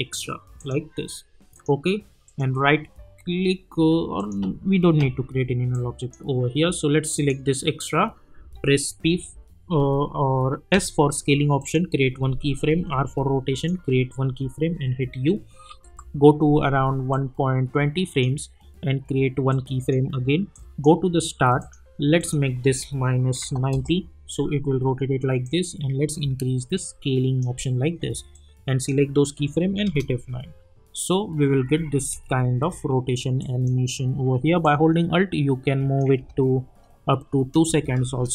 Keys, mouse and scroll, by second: 2.2 right click, 4.2-7.1 drag, 8.8-9.5 typing, 10.7 typing, 11.6 click, 12.8 r, 13.5 click, 14.7 u, 15.7 =, 17.1-20.5 drag, 22.7 -, 23.7 Return, 25.4-29.3 drag, 29.3 F9, 29.8 space, 31.7 space, 33.4 click, 34.9-36.2 alt+drag, 36.2 space.